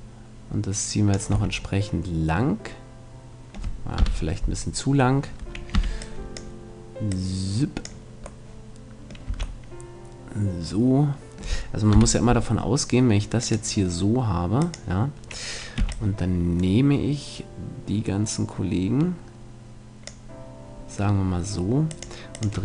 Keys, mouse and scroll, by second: 1.3 a, 1.7 middle click, 4.0 KP_7, 5.7 b, 7.1-8.5 drag, 8.5 middle click, 9.3 a, 10.0-11.7 middle drag, 11.9 KP_7, 13.4-16.5 drag, 15.8 b, 21.9-22.6 drag.